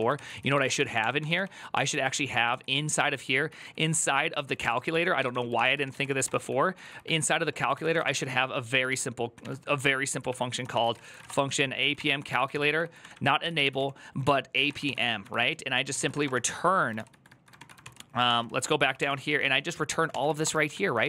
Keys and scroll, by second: 0.0-1.9 typing, 2.6 ctrl+u, 3.0-16.5 typing, 16.7 ctrl+c, 17.3 ctrl+^, 17.6 ctrl+c, 18.0 ctrl+d, 18.2 ctrl+d, 18.7-20.8 typing.